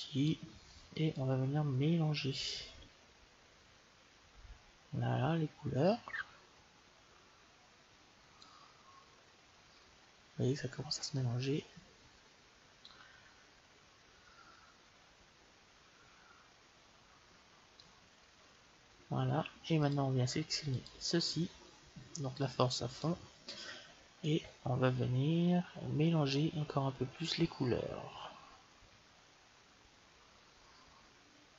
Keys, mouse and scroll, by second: 11.0-12.8 drag, 19.7 click, 22.3-26.0 drag.